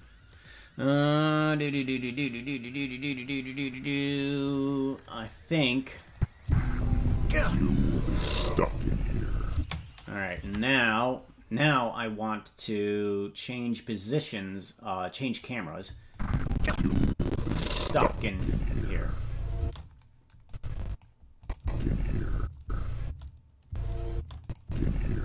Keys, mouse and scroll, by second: 6.1 click, 6.4 space, 9.5 space, 10.4 ctrl+Tab, 10.9 right click, 16.1-18.4 drag, 18.3 space, 19.6 space, 20.4 click, 21.4 click, 21.5-24.6 typing, 24.4 click.